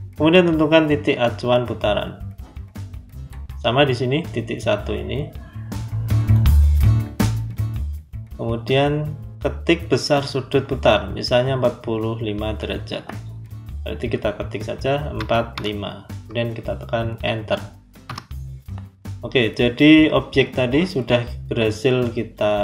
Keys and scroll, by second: 15.0 4, 17.9 Return.